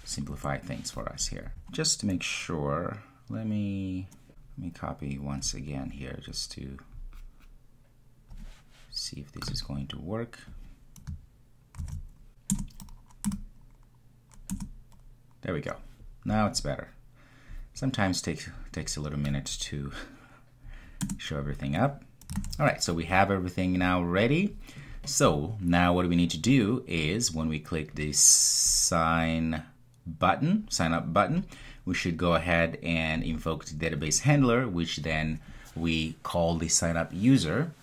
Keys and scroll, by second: 1.4 super+s, 11.8 super+v, 12.6 Return, 22.3 super+s.